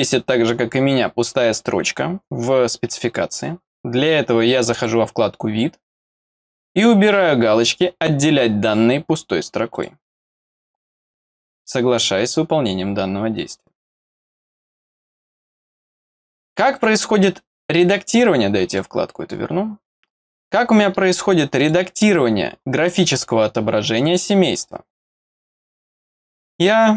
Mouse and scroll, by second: 4.7 click, 8.1 click, 9.7 click, 11.9 click, 16.7 click, 17.8 click, 19.6-20.0 scroll up 1, 20.5 middle click, 21.5 click, 22.3-23.1 scroll up 2, 23.1 middle click, 25.3 click.